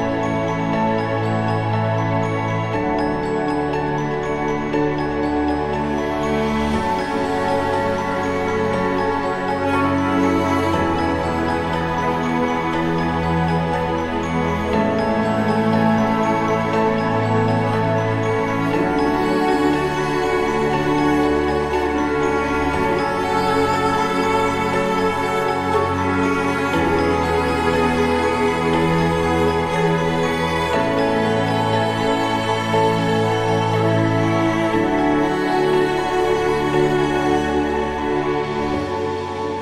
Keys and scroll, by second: 10.3 ctrl+s.